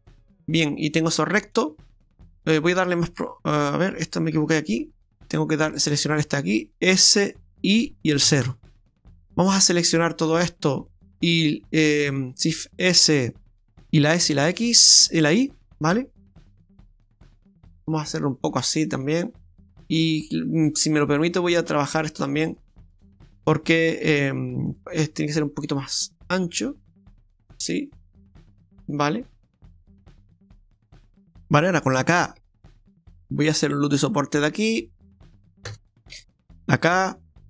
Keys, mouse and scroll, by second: 0.2 middle click, 3.0 shift+right click, 4.4 ctrl+z, 4.7 ctrl+z, 6.1 shift+right click, 6.9 s, 10.0 shift+right click, 10.3 shift+right click, 11.1 shift+right click, 12.1 shift+s, 14.0 s, 19.9 right click, 21.2 click, 21.9 right click, 22.3 alt+shift+right click, 22.5 right click, 24.1 shift+s, 25.1 s, 27.6-28.1 scroll down 5, 28.7-29.5 scroll up 3.